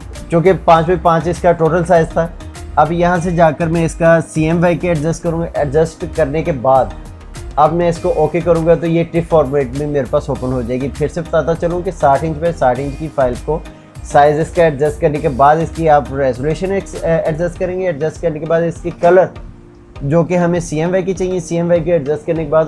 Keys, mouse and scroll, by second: 4.1 click, 4.4 click, 18.9 click.